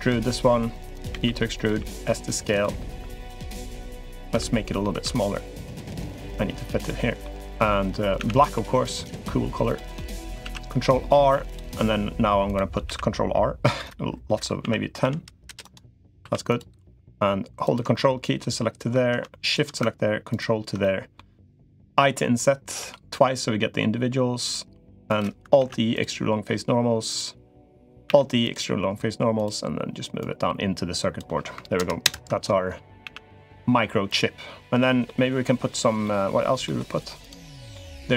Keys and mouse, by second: 0.9 e, 1.5 s, 3.5 l, 4.1 s, 6.6 click, 8.0 a, 8.2 g, 9.7 click, 10.2 ctrl+r, 12.6 ctrl+r, 16.0 3, 16.3 click, 17.5 ctrl+click, 17.7 middle click, 19.2 shift+click, 20.0 ctrl+click, 20.6 middle click, 25.3 alt+e, 27.8 alt+e, 30.0 click, 31.5 ctrl+KP_Add, 32.0 ctrl+KP_Add, 32.8 a, 33.1 g, 34.6 click, 34.8 middle click, 35.8 click, 36.4 click, 37.0 click, 37.2 middle click.